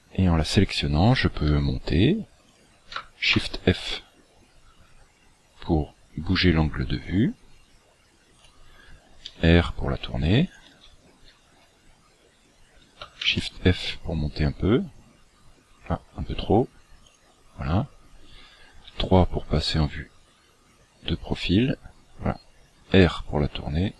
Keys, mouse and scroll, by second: 1.5 g, 3.4 shift+f, 9.2 r, 11.8-12.3 scroll down 3, 12.3-12.7 scroll up 3, 13.2 shift+f, 18.8 KP_3, 20.4-22.5 scroll down 8, 22.5 scroll down 1, 22.9 r.